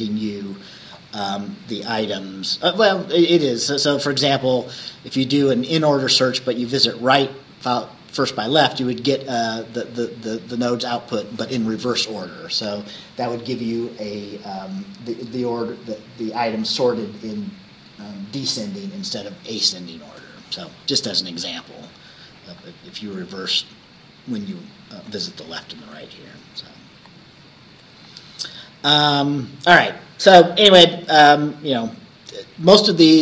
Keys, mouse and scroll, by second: 25.9 Right, 27.0 Right, 27.8 Right, 29.3 Left.